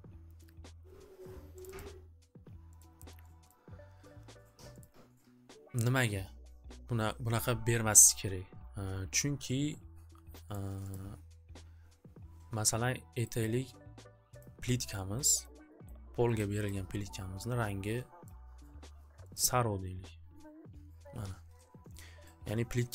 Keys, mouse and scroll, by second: 1.6 click, 1.9 click, 2.7 click, 3.4 click, 4.8 click, 10.5 click, 10.9 click, 13.4 click, 14.4 click, 15.4 click, 15.9 click, 16.3 click, 16.7 click, 18.2 click, 19.3 click.